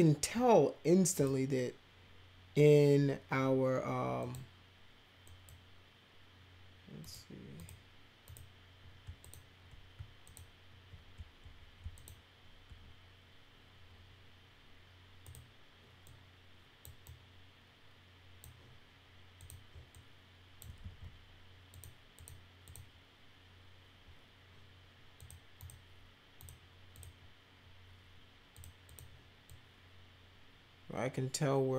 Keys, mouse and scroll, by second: 1.2 click, 4.2 click, 5.3 click, 7.0 click, 7.6 click, 8.3 click, 9.2 shift+click, 10.3 ctrl+click, 12.0 shift+click, 15.3 click, 16.0 click, 17.0-18.4 drag, 19.4 click, 19.9 click, 21.7 click, 22.2 click, 22.7 click, 25.2 click, 25.6 click, 26.4 click, 26.9 click, 28.5 click, 28.8 click, 29.5-31.7 drag.